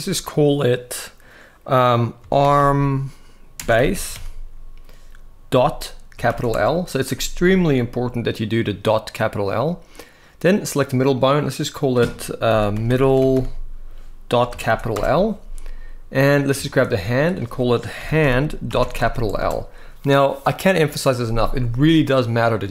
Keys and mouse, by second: 10.2 click, 10.8 click, 11.3-14.7 drag, 12.7 d, 15.9 click, 16.3 shift+middle click, 16.9-19.1 drag.